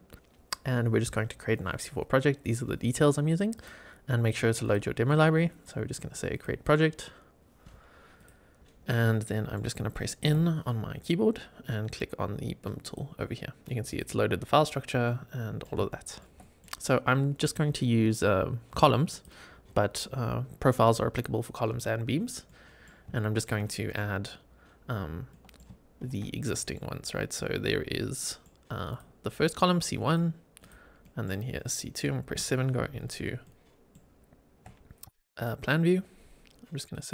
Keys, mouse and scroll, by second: 0.1 click, 3.4-4.6 drag, 6.2 click, 8.1 click, 9.0 middle click, 10.2 n, 12.7 click, 13.8 click, 15.0-15.6 middle drag, 15.8-16.1 shift+middle drag, 16.3 middle click, 17.3-19.2 drag, 22.4-22.8 middle drag, 23.0-23.4 shift+middle drag, 23.6 middle click, 25.2 middle click, 26.0 shift+a, 26.4 middle click, 28.1 middle click, 28.8 click, 30.0-30.6 drag, 30.9 middle drag, 32.2 KP_7, 33.0 scroll up 3, 33.3-33.8 shift+middle drag, 34.4-34.8 shift+scroll up 3, 35.1 shift+right click.